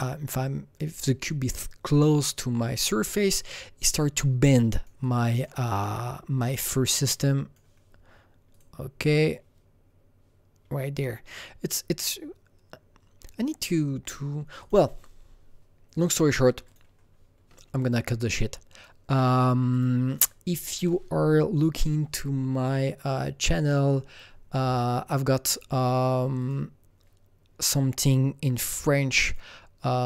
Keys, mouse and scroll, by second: 4.5 alt+right click, 5.0-8.5 alt+drag, 5.8-11.2 alt+middle drag, 8.5-11.2 drag, 14.6-15.9 drag, 15.9 click, 16.7 click, 18.3 click, 19.7 click, 22.6 click, 23.8 click, 26.4 click, 27.8 scroll down 3, 28.4 scroll up 2, 29.2 click.